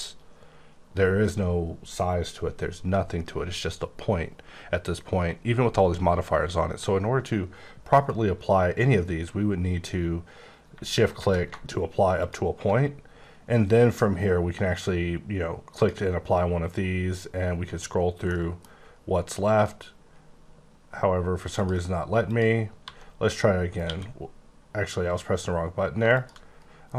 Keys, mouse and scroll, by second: 4.3-5.6 scroll up 10, 10.6 Caps_Lock, 12.2 shift+click, 15.8 click, 17.0-17.4 scroll down 5, 17.4-17.7 scroll up 7, 18.3 middle click, 18.7 scroll up 3, 18.9-20.0 scroll down 10, 20.0-20.3 scroll up 5, 20.4-21.5 scroll down 6, 21.5 click, 22.3 click, 22.8 1, 23.8 q, 26.1 shift+click, 26.7-26.9 scroll down 3.